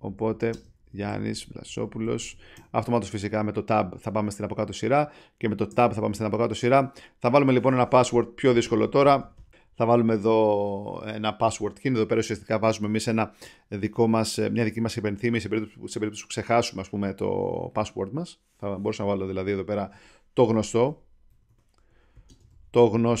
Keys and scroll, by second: 0.0-2.8 typing, 5.7 Tab, 20.4-23.2 typing.